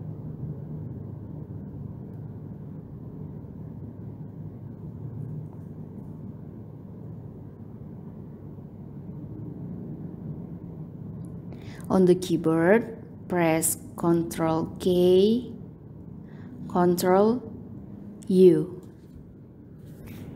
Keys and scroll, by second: 13.9 ctrl+k, 15.6 ctrl+u.